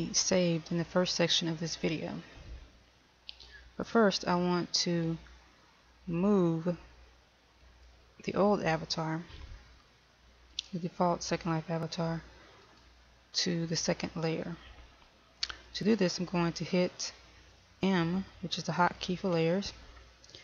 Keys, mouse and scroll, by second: 0.0 click, 7.8 right click, 10.6 shift+right click, 12.7 shift+right click, 19.0 m.